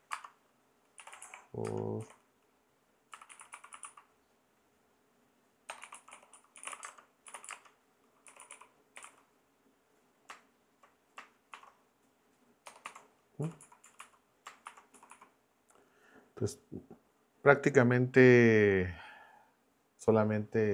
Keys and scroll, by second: 0.0-4.3 typing, 5.6-9.5 typing, 11.5 shift+-, 12.7 BackSpace, 12.8 0, 13.4 Down, 13.8 Up, 14.6 shift+;, 14.9 Down.